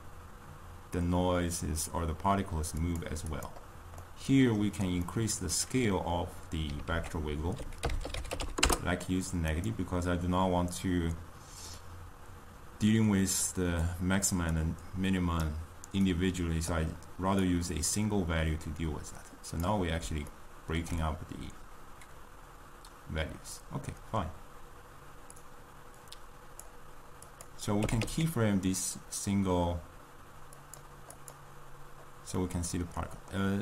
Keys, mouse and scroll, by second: 3.3 click, 15.6-20.3 drag, 20.3-24.3 ctrl+middle drag, 26.1-27.4 drag, 28.0 g, 31.1 click.